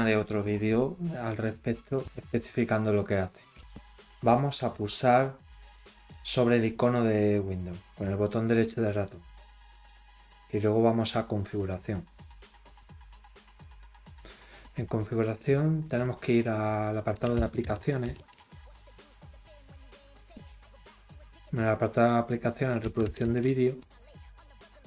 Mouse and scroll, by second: 0.3 click, 4.4 right click, 5.7 click, 8.0 right click, 11.3 click, 19.1 click, 23.7 click.